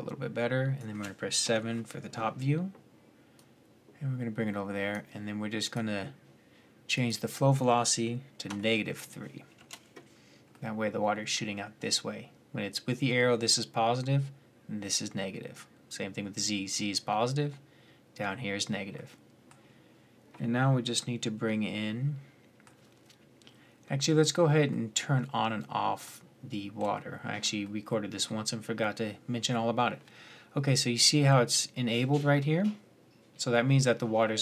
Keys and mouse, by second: 1.2 KP_7, 1.3 click, 4.4-5.3 drag, 5.4-7.5 drag, 12.5-18.7 middle drag, 22.7-24.5 middle drag, 32.8-34.4 middle drag.